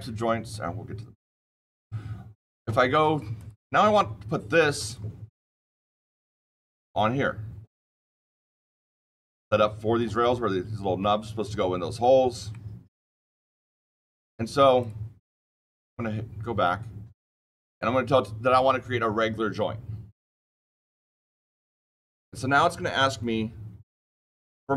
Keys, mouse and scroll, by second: 1.1 click, 2.4 click, 3.3 click, 3.8 click, 5.3-5.7 scroll down 2, 6.1-6.5 scroll, 6.5-9.4 shift+middle click, 9.1 shift+middle click, 12.4-13.6 shift+middle click, 12.8 shift+middle click, 14.1 middle click, 14.1 middle click, 14.7 click, 15.4 click, 20.5 click.